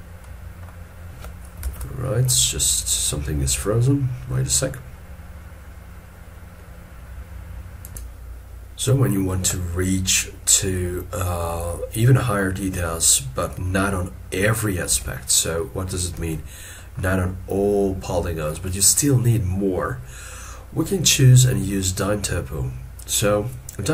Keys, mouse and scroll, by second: 1.7 ctrl+Tab, 16.2 alt+e, 16.8 middle click.